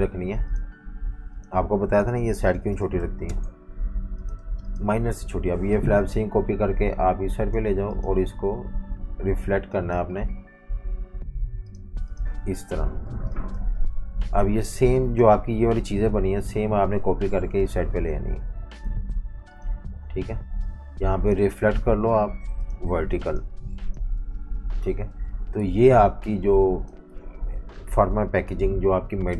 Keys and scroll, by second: 1.7-4.6 typing, 13.1 typing, 24.8 super+-, 25.6 typing, 27.1 v.